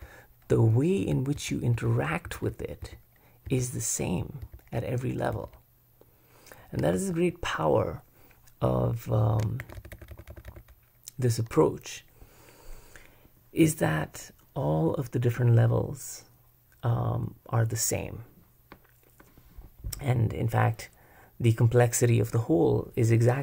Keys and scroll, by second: 1.4 shift+k, 1.7 shift+k, 2.2 shift+k, 3.5 shift+k, 4.4 shift+k, 5.3 shift+k, 6.9 h, 9.6 shift+j, 10.3 shift+j, 10.7 shift+j.